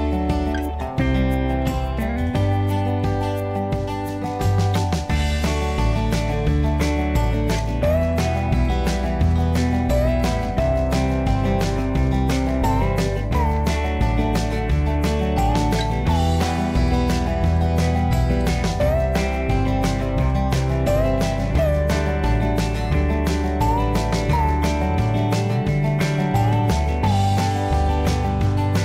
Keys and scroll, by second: 0.8-1.7 typing, 2.0 Return, 5.4 Escape, 5.5 Escape, 5.7 Escape, 5.8 Escape, 14.9 typing, 16.6-17.5 typing.